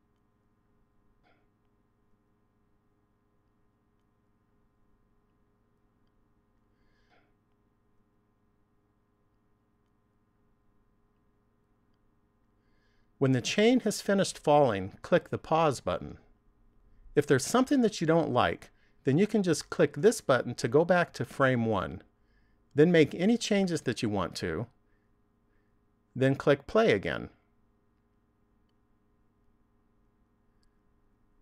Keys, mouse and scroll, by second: 15.3 click, 20.6 click, 23.9 right click, 24.8 click, 28.5 click.